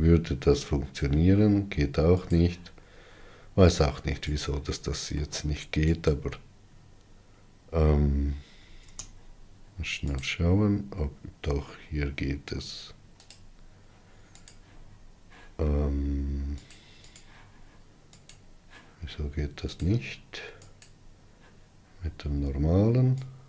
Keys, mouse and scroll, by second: 5.1 click, 6.0 middle click, 6.7 click, 9.7 ctrl+space, 17.8 click, 19.0 click, 21.5-23.4 drag.